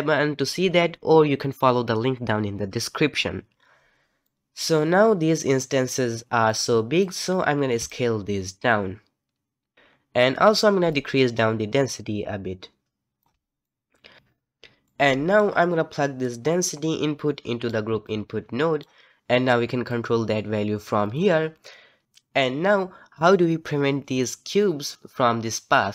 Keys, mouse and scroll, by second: 4.2 middle click, 4.7-5.6 scroll up 1, 5.6-5.9 scroll down 1, 5.9-7.2 middle drag, 7.2-7.9 scroll up 2, 7.9-9.7 shift+drag, 10.9-13.6 shift+drag, 13.6-14.2 middle drag, 14.8-16.2 middle drag, 16.2 click, 18.0 click, 19.9-21.1 drag, 21.5 middle click.